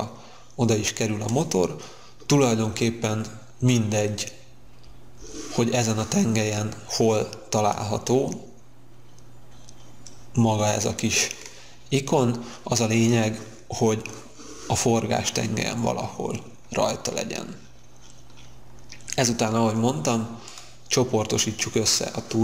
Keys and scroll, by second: 19.2 space.